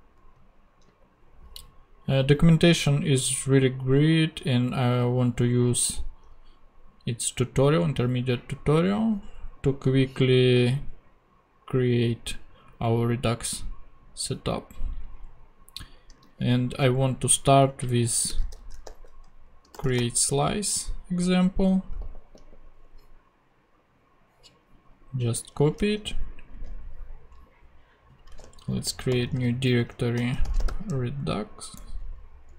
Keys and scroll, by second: 16.2 super+f, 18.1-20.4 typing, 22.0 super+g, 28.4 super+j, 29.1 super+n, 30.2 super+r, 30.2-31.2 typing, 31.8 Escape.